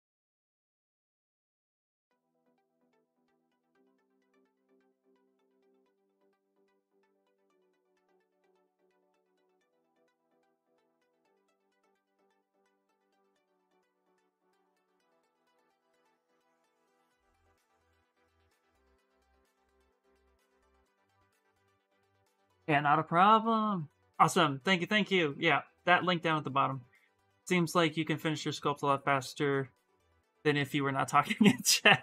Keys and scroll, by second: 4.1 ctrl+z, 4.2 ctrl+z, 4.3 ctrl+z, 4.5 ctrl+z, 4.9 ctrl+z, 5.0 ctrl+z, 5.3 ctrl+z, 5.7 ctrl+z, 6.1 ctrl+z, 6.4 ctrl+z, 6.7 ctrl+z, 18.9 s.